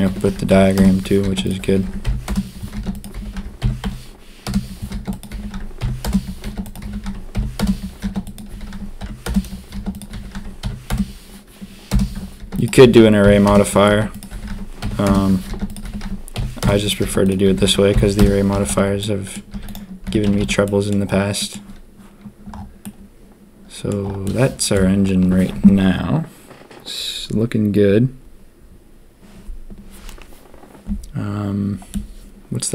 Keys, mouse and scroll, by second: 0.0 r, 1.2 shift+d, 1.6 r, 2.7 shift+d, 3.1 r, 4.9 shift+d, 5.3 r, 6.4 shift+d, 6.8 r, 8.0 shift+d, 8.4 r, 9.7 shift+d, 10.1 r, 12.4 shift+d, 12.7 r, 13.9 shift+d, 14.3 r, 15.5 shift+d, 15.8 r, 17.0 shift+d, 17.4 r, 18.5-20.3 typing, 19.0 middle click, 19.2 click, 20.0 Tab, 20.6 middle drag, 21.3 middle click, 22.8-23.8 middle drag, 24.2-24.7 middle drag, 31.9-32.7 middle drag.